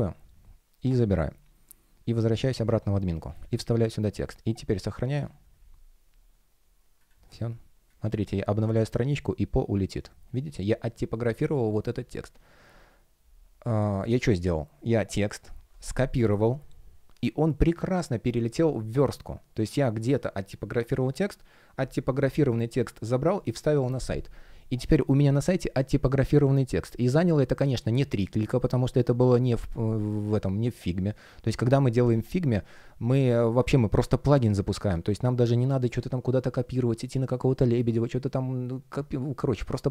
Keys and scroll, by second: 3.6 super+v, 8.6 super+r.